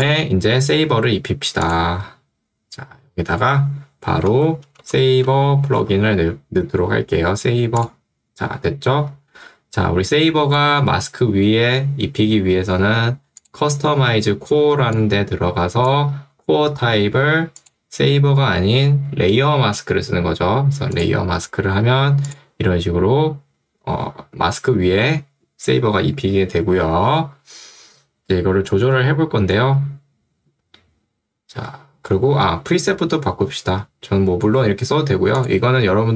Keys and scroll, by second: 4.3 ctrl+space, 4.4-6.4 typing, 14.7 ctrl+2, 17.1 Escape.